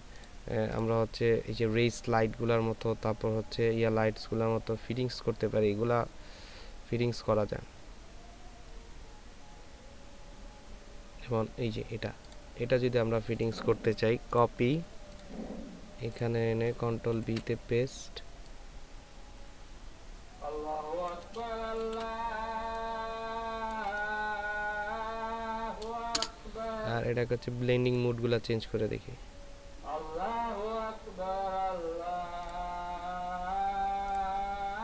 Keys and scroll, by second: 17.2 ctrl+v, 21.8 ctrl+t, 22.6 ctrl+alt+t.